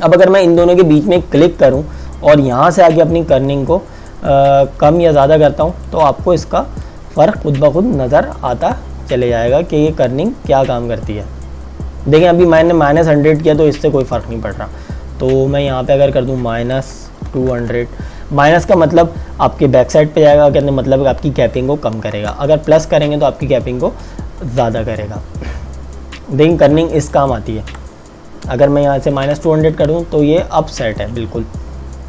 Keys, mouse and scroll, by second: 5.1 click, 13.5 click, 17.0 KP_Subtract, 17.3 KP_2, 17.5 KP_0, 22.2 Return, 26.4 click, 29.5 Return.